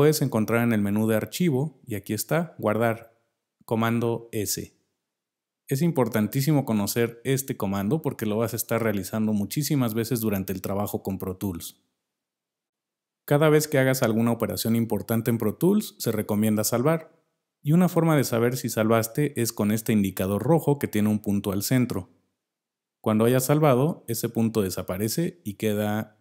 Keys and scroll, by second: 7.4 super+s.